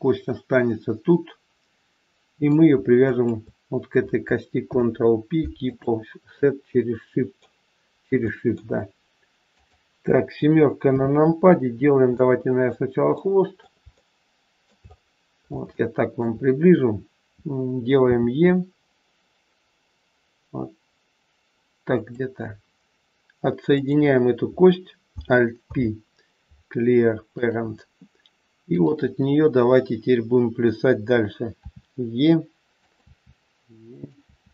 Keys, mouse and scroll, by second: 3.0 shift+click, 4.6 ctrl+p, 6.3 middle click, 8.2 middle click, 9.5 click, 10.8 KP_7, 11.6-12.2 scroll down 4, 12.1 middle click, 13.1 middle click, 13.8 shift+middle click, 14.8-15.4 scroll up 4, 15.4-15.7 scroll up 1, 15.7 shift+middle click, 18.1 e, 23.6 click, 25.6 alt+p, 28.6 click, 31.6 e, 32.9 e.